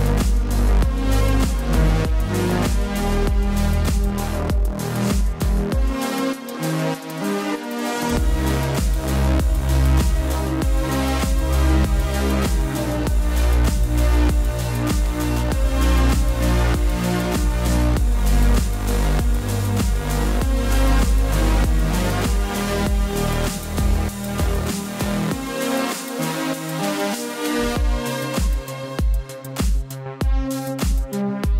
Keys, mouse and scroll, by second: 0.0-2.8 typing, 0.6 click, 1.5 click, 1.9 click, 2.2 click, 2.8 click, 4.9 space, 5.0 click, 5.0 space, 6.2-6.9 typing, 7.4 click, 13.6 click, 14.8 click, 16.9 click, 17.9 click, 18.6 ctrl+t, 19.8 click, 21.2 Return, 21.7 ctrl+a, 22.1 click, 22.6 ctrl+d, 23.4 click, 26.7 right click, 28.1 click, 30.0 click, 30.7 right click.